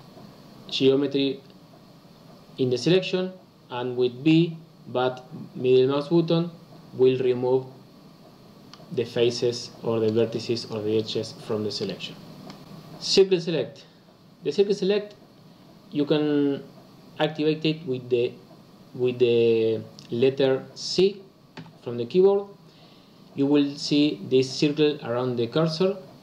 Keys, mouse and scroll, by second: 4.2 b, 11.4 b, 21.5 c.